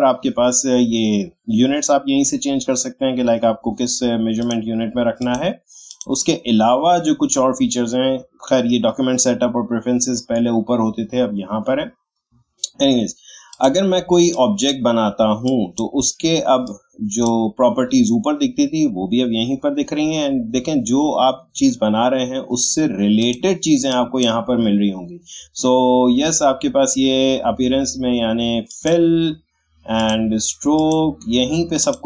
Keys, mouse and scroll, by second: 4.4 click, 13.5-19.6 drag, 23.2 click, 28.7-32.0 drag.